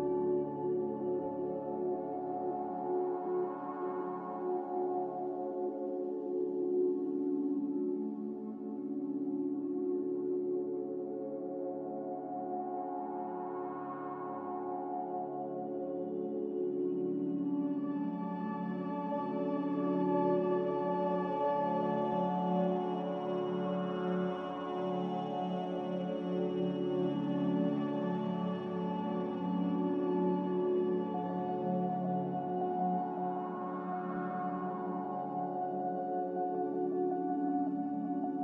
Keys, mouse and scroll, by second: 0.7-3.0 typing, 4.0 typing, 5.8 b, 18.8 z, 21.0 Delete, 23.1-24.2 typing, 25.5 Escape, 31.1-32.4 typing, 34.9-35.6 typing, 37.9 z.